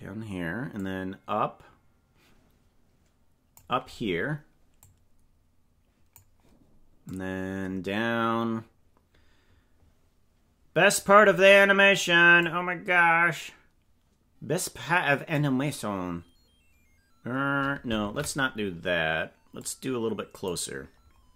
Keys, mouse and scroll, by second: 0.8-3.6 drag, 4.8-6.2 drag, 7.2-11.0 drag, 12.4-14.2 drag, 18.1 ctrl+z, 19.6 click.